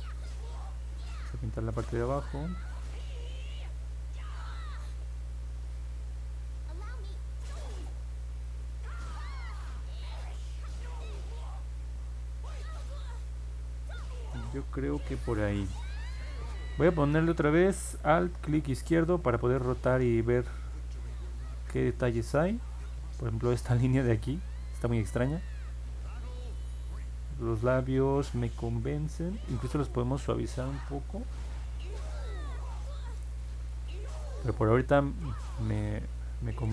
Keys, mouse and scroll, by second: 1.2-14.0 drag, 18.5-23.5 alt+drag, 24.7-31.0 alt+drag, 33.2-35.8 alt+drag.